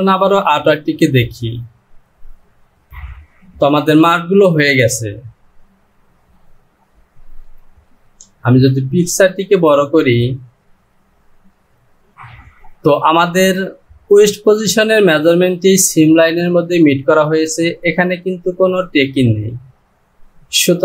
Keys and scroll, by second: 15.9-16.4 typing.